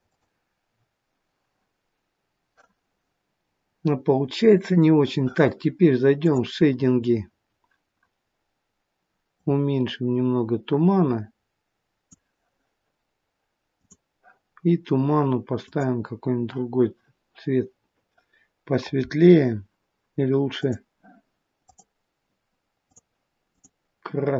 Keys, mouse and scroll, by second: 0.0 click, 3.5 scroll down 1.